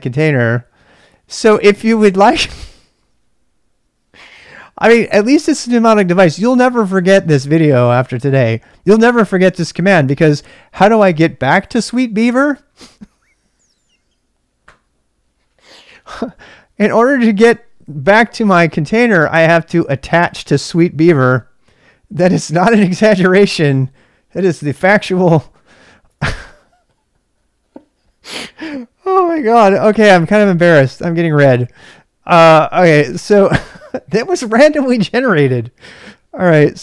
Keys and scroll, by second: 25.0-26.0 typing.